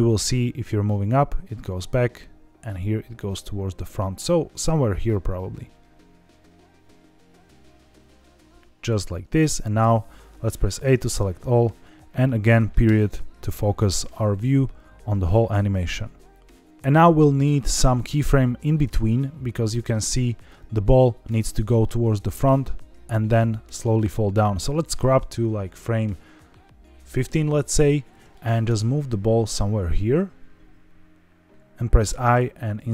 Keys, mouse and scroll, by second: 8.7 click, 9.7 a, 12.8 KP_Decimal, 14.1 scroll down 3, 15.2 click, 16.4-17.4 drag, 16.4 scroll up 4, 20.4-21.2 drag, 23.6-27.7 drag, 28.6 g, 31.5 click.